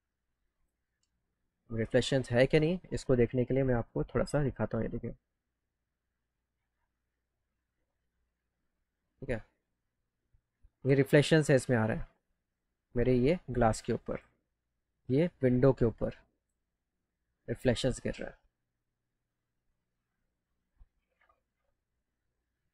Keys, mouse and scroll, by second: 0.5 click, 1.7 scroll up 1, 3.4 alt+middle click, 4.4 alt+middle click, 7.1 alt+middle click, 10.2 alt+click, 10.9 scroll down 4, 12.6 middle click, 14.0 click, 15.8 click, 18.1 click, 19.3-20.3 drag, 22.0 click.